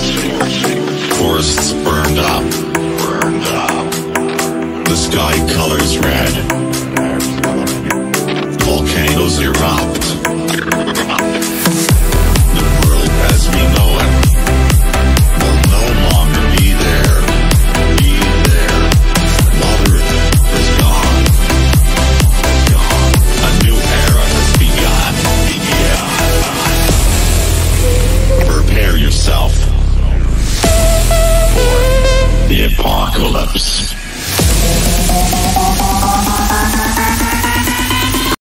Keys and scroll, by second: 10.1 ctrl+r, 19.4 ctrl+v, 27.7 F5, 27.8 F9, 35.5 space.